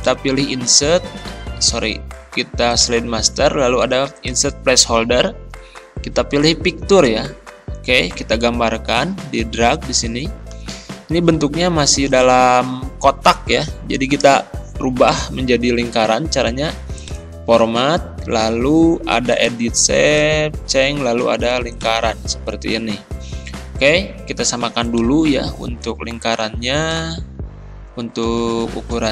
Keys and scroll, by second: 28.8 Return.